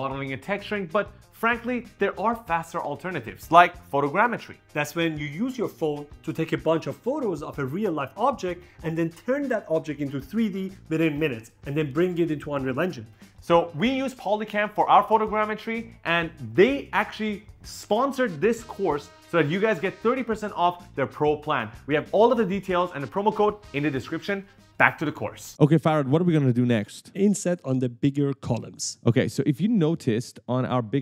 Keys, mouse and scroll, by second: 26.9 click, 27.4 right click, 30.5 scroll down 1.